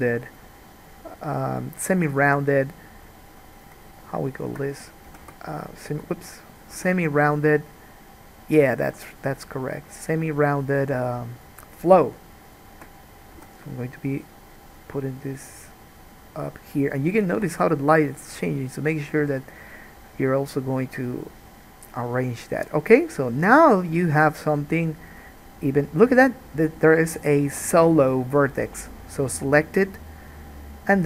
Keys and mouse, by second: 3.7 click, 4.1 shift+click, 4.5 shift+click, 5.2 g, 6.9 g, 9.3 click, 10.1 shift+click, 10.8 shift+click, 11.5-12.7 shift+drag, 13.5 g, 16.7-25.2 middle drag, 17.7 alt+a, 25.2 click, 25.3-28.2 middle drag, 28.2-29.9 drag, 29.9-31.0 middle drag.